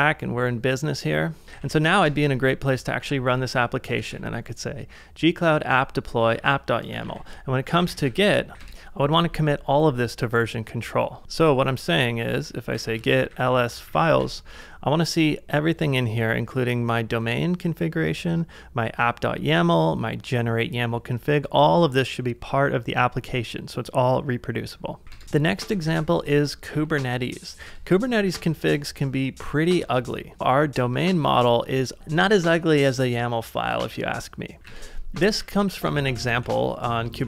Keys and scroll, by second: 1.5 ctrl+w, 2.0 Return, 3.0 a, 4.0 shift+v, 6.5 ctrl+c, 6.9-9.0 typing, 11.2 ctrl+c, 11.9-14.2 typing, 25.0-26.7 typing, 27.7 Return, 28.2 j, 29.7 Return, 31.7 ctrl+d, 32.0 typing, 34.6 ctrl+w, 34.6 ctrl+h, 35.1-36.5 typing.